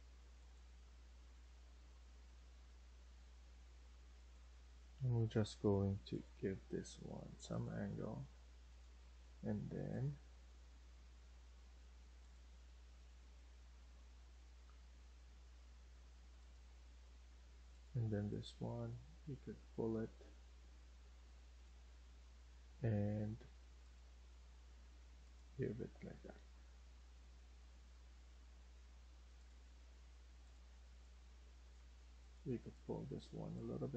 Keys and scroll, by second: 2.0 Escape, 2.4 Escape, 2.7 Escape, 3.5 Escape, 4.8 Delete, 16.6 Escape, 16.8 Escape, 17.0 Escape, 29.5 Escape, 29.8 Escape, 31.8 Escape.